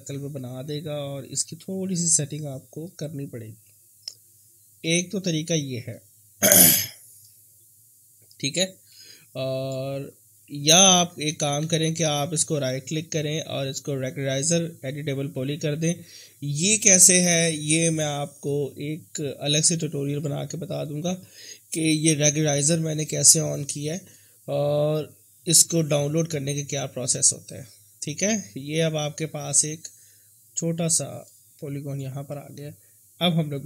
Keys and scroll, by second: 1.9 e, 4.9 w, 11.0 ctrl+z, 11.3 ctrl+z, 11.6 ctrl+z, 12.0 ctrl+z, 16.2 r, 18.6 w, 22.2 e, 24.3 w.